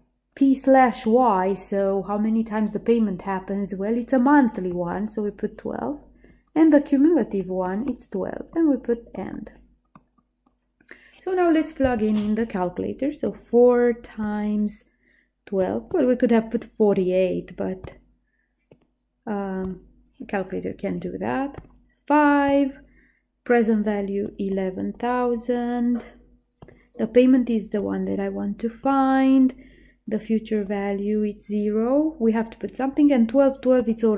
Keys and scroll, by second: 13.4 4, 15.5-16.4 typing, 17.9 Left, 18.9 2, 19.8 Down, 21.6 5, 22.6 Down, 24.4-25.7 typing, 26.7 Down, 27.9 0, 28.9 Down, 30.7 0, 33.9 Up.